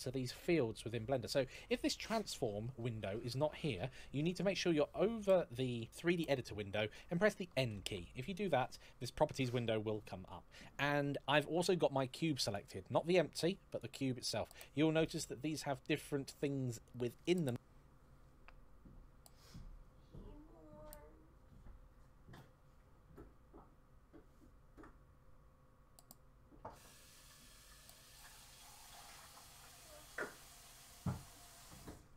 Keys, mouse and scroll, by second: 3.9 n, 7.5 n, 13.5 click, 16.1 click.